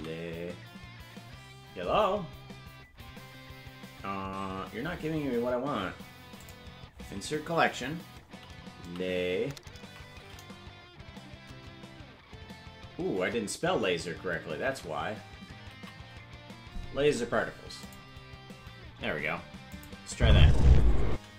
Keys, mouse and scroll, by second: 4.5-5.0 scroll down 10, 6.3-18.1 drag, 13.1 BackSpace, 19.7 click, 20.1 space.